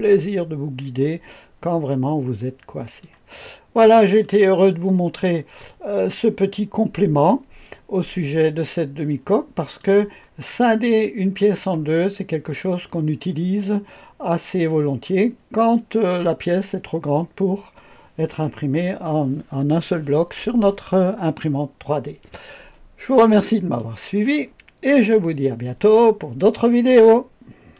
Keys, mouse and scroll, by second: 3.4-3.9 scroll up 1, 4.1-4.6 right drag, 5.1-5.6 scroll down 1, 5.6-9.7 drag, 10.1 scroll up 2, 10.7-11.5 drag, 11.8 scroll down 2, 12.3 scroll up 2, 13.6-14.6 scroll down 2, 14.6-15.6 drag, 22.4-23.8 drag, 24.1 click, 27.6 click.